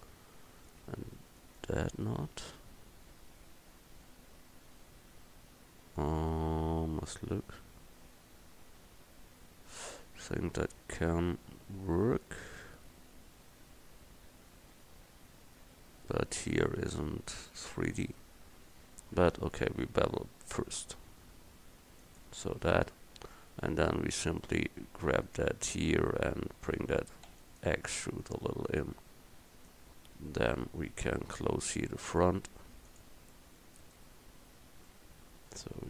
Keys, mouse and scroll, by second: 0.0 middle click, 0.0 right click, 0.3-3.5 middle drag, 19.8 ctrl+b, 24.5 click, 25.3-27.3 middle drag, 27.3 e, 28.3-30.2 drag, 32.9 click, 33.8-34.9 right drag, 35.0 middle click, 35.1 middle click, 35.3 right click, 35.4 middle click.